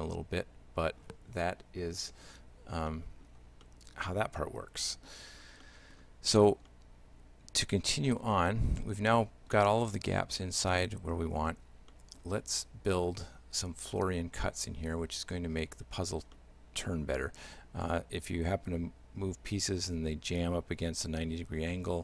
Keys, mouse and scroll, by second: 2.9 middle click, 3.7 shift+middle click, 5.5-5.8 scroll down 2, 5.7 middle click, 6.7 shift+middle click, 8.0 middle click, 8.5 shift+middle click, 9.8 shift+middle click, 11.9 middle click, 16.4 shift+middle click.